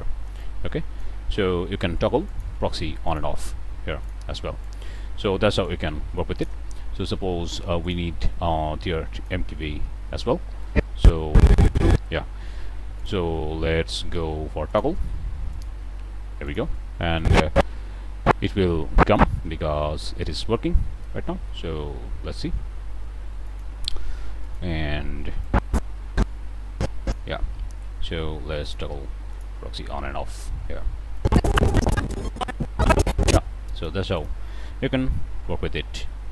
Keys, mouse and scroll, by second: 0.3-1.1 drag, 1.2 ctrl+z, 2.2 click, 3.0 click, 3.9 click, 4.6-5.8 drag, 5.9 ctrl+z, 6.3 ctrl+click, 7.8 click, 8.2-9.4 drag, 9.8-10.2 drag, 10.5-12.1 drag, 12.9 click, 14.6 click, 15.4 click, 16.4 click, 17.1-19.3 drag, 20.6-21.3 scroll down 2, 21.4 middle click, 23.4 click, 24.4 click, 25.4-27.2 drag, 28.6 click, 29.2 click, 30.2 click, 31.1-33.4 drag, 33.7 shift+click, 34.1 shift+click, 35.4 k.